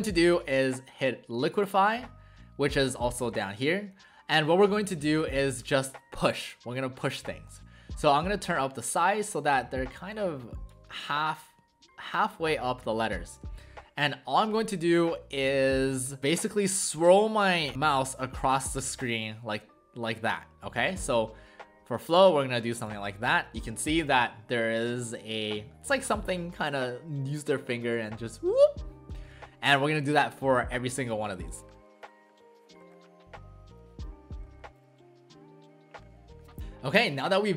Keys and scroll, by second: 32.8 ctrl+z, 32.9 ctrl+z, 34.5 ctrl+z, 34.5 ctrl+z, 34.8 [.